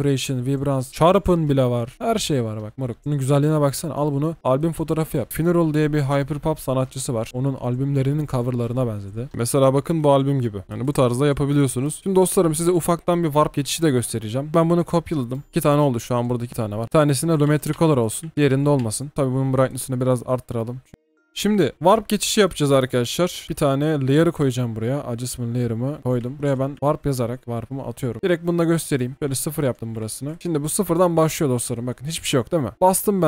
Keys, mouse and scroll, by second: 9.3 double click, 9.6 scroll down 1, 9.8-10.2 scroll up 1, 14.5 ctrl+click, 15.4 double click, 16.8 ctrl+z, 17.8 ctrl+c, 18.5 ctrl+shift+z, 18.8 ctrl+shift+z, 19.1 ctrl+b, 22.5 right click, 28.1 typing, 29.1 Return, 30.2 ctrl+shift+d, 30.4 Delete, 30.8 double click, 31.4-32.7 alt+scroll up 1.